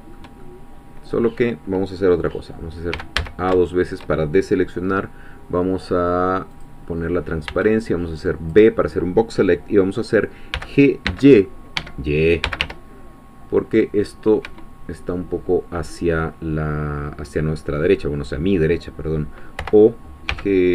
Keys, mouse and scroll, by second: 3.0 a, 3.6 shift+middle click, 6.6 click, 7.5 b, 7.8 click, 10.5 g, 11.0 x, 11.8 Escape, 12.4 g, 12.6 y, 14.4 Escape, 19.6-20.7 typing.